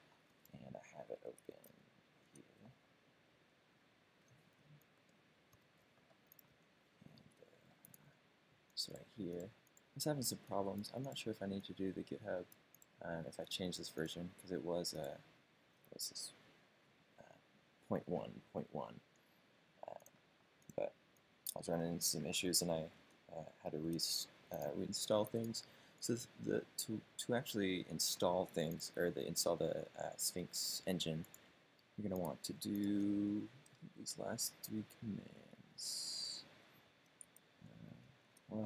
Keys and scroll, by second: 6.6 d, 7.3 BackSpace, 23.1 super+space, 23.3-24.1 typing, 23.9 Return, 25.1 typing, 33.6 Up, 34.1 Up, 35.0 Up, 35.7 Up, 37.4 super+space, 38.0 g, 38.3 Return.